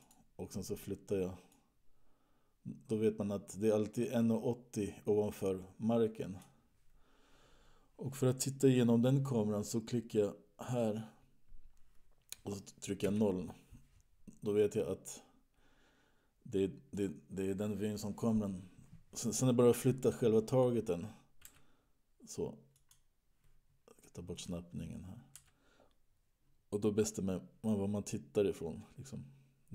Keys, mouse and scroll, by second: 0.4 click, 2.2 click, 11.0 click, 13.3 KP_0, 14.9-16.3 scroll up 8, 17.2 click, 21.6 g, 24.8 click, 25.7 g.